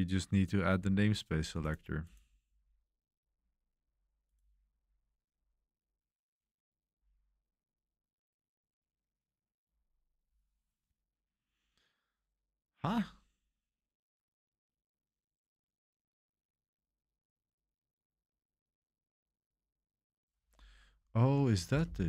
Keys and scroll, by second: 21.7-22.0 typing.